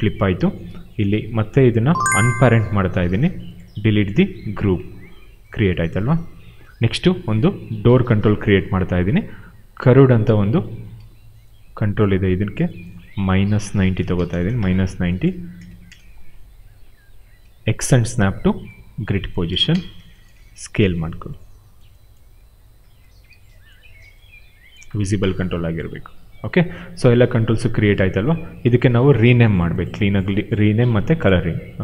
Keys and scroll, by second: 3.0 shift+p, 4.2 Delete, 6.7 Delete, 10.2 w, 10.9 w, 12.0 e, 13.8 -, 14.2 Return, 15.2 w, 15.5 space, 17.3 w, 18.0 x, 19.4 space, 20.3 r, 22.5 w, 23.7 r.